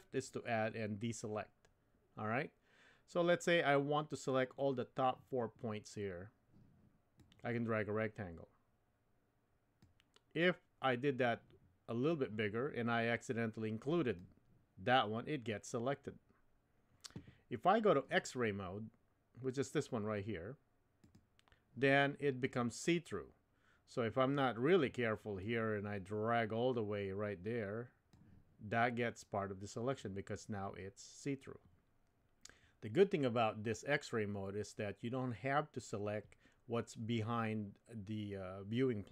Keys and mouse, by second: 7.2-9.9 drag, 12.1-14.2 drag, 21.1 click, 25.4-28.1 drag.